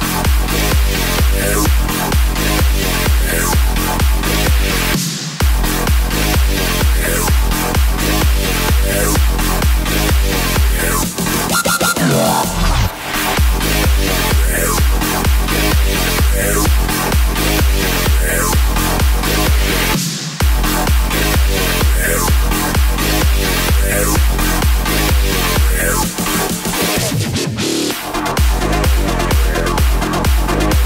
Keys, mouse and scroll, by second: 1.6 KP_7, 2.7 shift+d, 4.1-4.5 scroll down 1, 4.5 s, 8.8 KP_0, 14.6-16.5 drag, 16.6-19.5 drag, 20.6 click, 21.0-23.0 scroll up 2, 23.0 click, 23.3 x, 24.1 click, 24.8 x, 25.3 click, 25.4 x, 26.4 click, 26.5 x, 27.0 click, 27.9 click, 28.3 x.